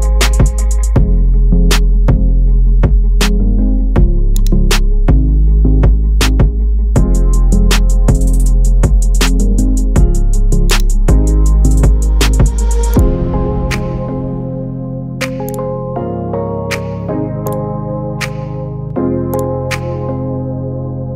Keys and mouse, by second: 1.8 space, 4.4-5.4 drag, 6.1 Delete, 7.4 alt+r, 9.4-10.0 middle drag, 10.7-11.1 drag, 12.9 click, 15.4 drag, 15.7 r, 17.7 space, 18.5 shift+middle click, 19.3 click, 19.7 space.